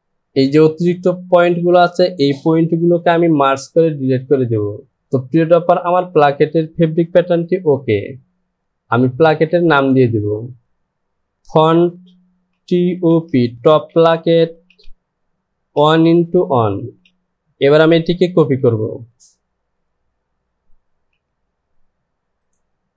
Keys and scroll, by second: 2.9 shift+=, 11.3 typing, 12.6-17.0 typing, 18.6 ctrl+c.